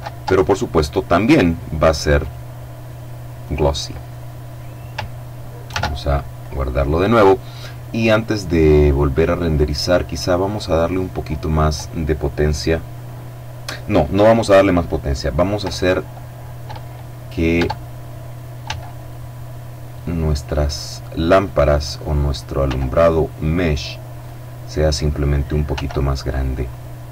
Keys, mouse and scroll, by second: 0.1-0.9 drag, 1.4 click, 2.6 click, 4.9 ctrl+s, 5.6 click, 7.0-8.0 scroll down 2, 8.9 right click, 10.6 click, 16.8 Tab, 17.8 s, 19.4 click, 20.1 right click, 20.9-22.1 drag, 21.8 s, 22.9-23.9 drag, 23.3 right click, 24.0-25.1 drag, 24.9 s, 25.8 click.